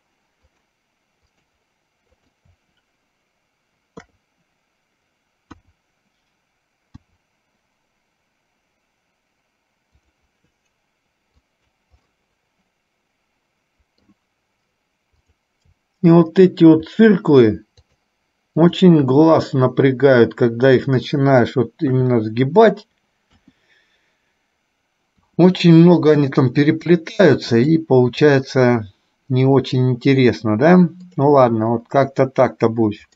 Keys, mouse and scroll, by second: 0.7 shift+click, 1.4 shift+click, 2.3 shift+click, 4.2 KP_3, 5.7 KP_1, 12.2-14.3 middle drag, 15.3 click, 17.9 shift+click, 18.8 shift+click, 22.1 KP_3, 28.6-30.1 middle drag, 31.2 click.